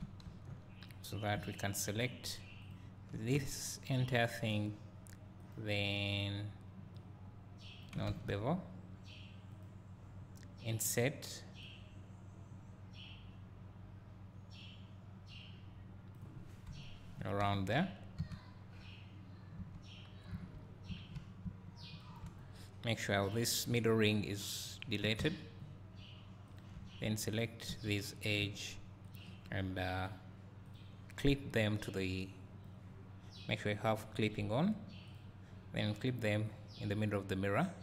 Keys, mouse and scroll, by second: 0.3 3, 0.9 click, 2.8 ctrl+click, 7.1-9.7 drag, 8.1 ctrl+z, 10.9-15.7 drag, 16.2-23.3 drag, 16.8 KP_1, 26.6 x, 26.8 2, 28.0 click, 29.2 ctrl+click, 30.7 click, 32.0-35.1 drag, 36.5-37.8 drag.